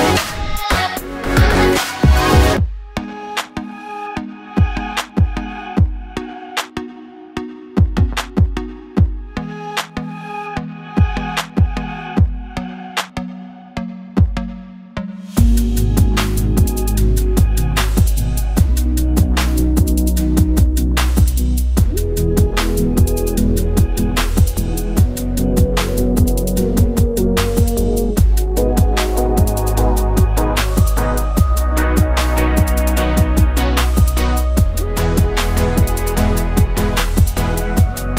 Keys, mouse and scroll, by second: 3.0 Tab, 5.7-9.4 drag, 7.1 g, 9.4-10.2 scroll down 2, 10.2 KP_0, 11.2 s, 12.0 g, 12.3 s, 13.5 g, 14.8 s, 15.9 scroll down 1, 16.0-17.7 middle drag, 16.3-20.4 typing, 21.8 KP_0, 22.8 KP_1, 23.0-23.3 scroll up 1, 23.3 g, 24.3 click, 24.5 KP_7, 25.1 scroll down 1, 25.2-25.5 scroll up 1, 25.6 g, 26.1 click, 26.2 KP_1, 26.6 KP_0, 26.7 KP_1, 26.8 scroll up 1, 27.0-27.5 scroll down 1, 27.5-29.8 middle drag, 27.8 scroll down 1, 28.1 KP_0, 28.4-29.1 scroll down 1, 29.8-31.0 drag, 30.3 KP_1, 30.6 s, 31.9 g, 32.1 click, 32.3 g, 33.7-35.2 typing, 36.9 g.